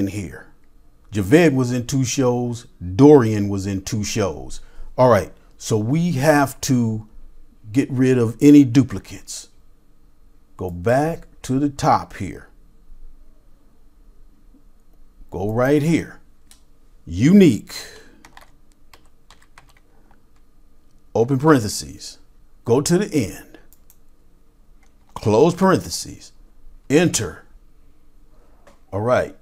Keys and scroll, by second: 17.7-21.8 typing, 25.5 typing, 26.7-27.4 typing.